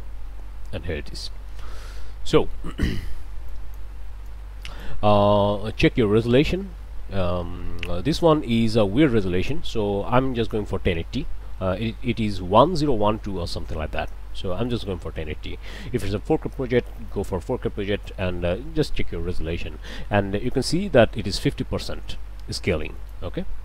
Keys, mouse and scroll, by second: 0.5 middle click, 1.9-2.2 scroll up 1, 2.3 click, 3.5 click, 4.2 click, 8.2 scroll up 1, 8.7 click, 13.8 scroll down 2, 14.5 click, 23.0 ctrl+shift+click.